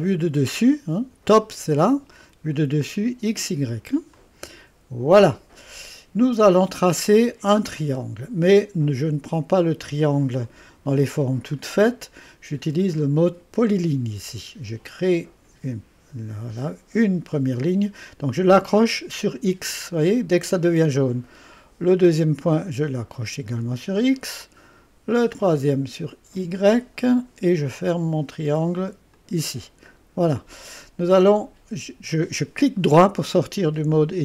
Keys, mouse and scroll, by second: 0.0 click, 4.1 click, 4.8 click, 6.7-10.4 right drag, 10.4-12.7 drag, 15.1 click, 20.4 click, 23.6 click, 26.6-27.6 drag, 29.1 click, 29.9-31.5 middle drag.